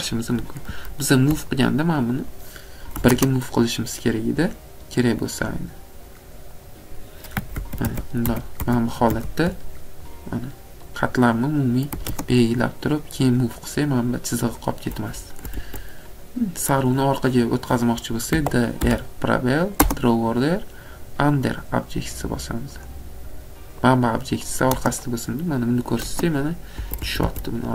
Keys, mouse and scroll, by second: 1.6 click, 2.3 click, 3.0 m, 4.5 click, 6.7 click, 7.6 ctrl+z, 7.8 ctrl+z, 8.3 ctrl+z, 8.6 ctrl+z, 9.1 ctrl+z, 10.2 click, 11.0 click, 12.0 m, 13.3 click, 14.7 click, 15.3 Escape, 15.6 Escape, 16.0 middle click, 16.1 middle click, 16.8 click, 18.4-18.8 typing, 21.4 click, 22.9 click, 24.0 click, 24.6 click, 26.8 Escape, 27.0 Escape, 27.3 Escape.